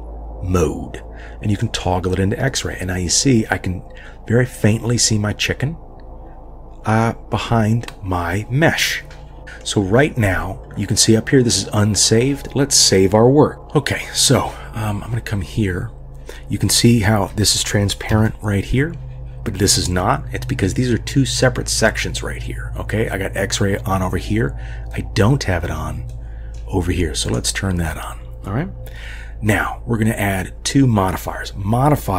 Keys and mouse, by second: 1.6 click, 9.4 middle click, 13.5 shift+a, 18.4-18.7 shift+middle drag, 24.9 middle click, 26.1 middle click, 27.3 click.